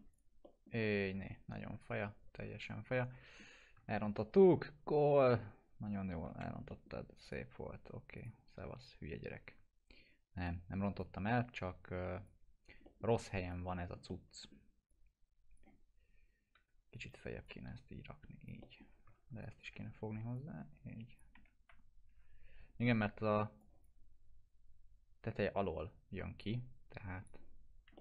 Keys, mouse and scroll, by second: 0.1 click, 0.4 middle click, 0.8-3.6 alt+middle drag, 3.8 ctrl+z, 6.2 F4, 6.6 middle click, 7.2 click, 8.6 scroll up 1, 8.8 F4, 9.1 scroll down 1, 10.4-11.0 click, 11.5-12.5 drag, 12.8 middle click, 13.2 click, 13.6 middle click, 14.0-14.7 alt+middle click, 14.9-15.8 click, 16.0 scroll up 1, 16.5 w, 16.7 scroll down 1, 17.4-18.9 click, 18.6 middle click, 18.9 scroll down 1, 19.1 ctrl+z, 19.4 ctrl+click, 20.3-21.2 click, 21.4 scroll up 1, 21.6 F3, 22.0 scroll up 1, 23.6 click, 26.4-27.3 drag, 27.9 alt+middle click.